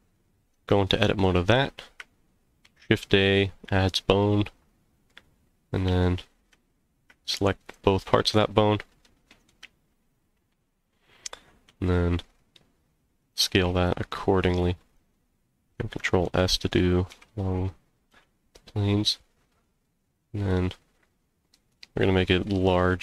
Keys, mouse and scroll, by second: 0.5 Tab, 2.6 shift+a, 4.2 middle click, 5.4 scroll up 1, 5.9 z, 7.6 shift+click, 9.0 middle click, 9.6 z, 11.3 g, 11.7 z, 13.2 click, 13.6 s, 14.9 click, 16.2 s, 17.1 x, 18.1 y, 21.7 click, 22.5 middle click.